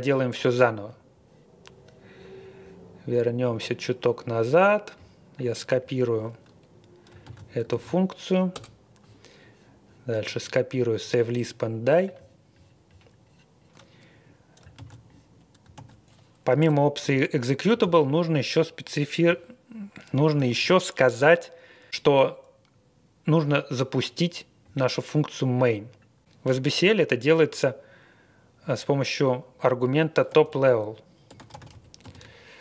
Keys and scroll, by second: 7.2 super+c, 7.7 super+v, 8.5 Return, 14.8 super+c, 15.7 super+v, 16.6 Return, 17.0 Tab, 17.8 shift+;, 30.1-32.6 typing.